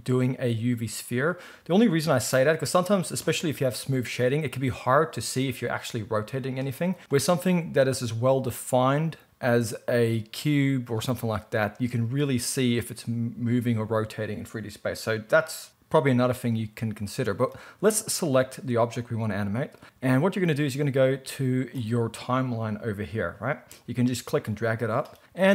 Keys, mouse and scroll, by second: 2.2 g, 3.3-6.5 right drag, 4.6 r, 6.5 middle click, 6.8 click, 7.0 x, 7.6-9.2 middle drag, 9.7-17.9 middle drag, 17.9 click, 18.0-18.4 middle drag, 19.8-25.5 drag.